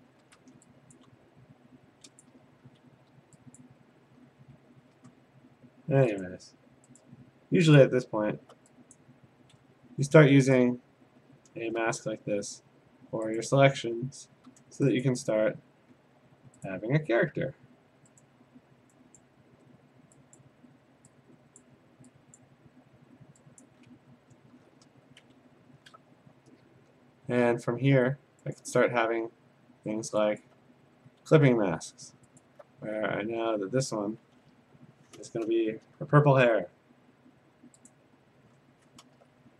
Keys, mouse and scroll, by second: 0.2 ctrl+d, 3.7 click, 3.7 g, 6.3 click, 7.0 click, 7.8 click, 8.0-8.3 scroll, 8.8 scroll, 9.0 click, 10.6 click, 11.5-11.8 scroll, 12.3 a, 13.4 click, 14.3 g, 15.1 click, 16.7 click, 18.2 click, 19.2 click, 20.4 click, 21.6 click, 23.4 click, 24.6 click, 24.8 b, 25.4-26.2 scroll, 28.6 click, 29.9 click, 30.4 alt+click, 31.2 ctrl+z, 32.4 alt+click, 34.6 p, 36.6 alt+BackSpace, 37.9 click, 39.0 alt+BackSpace.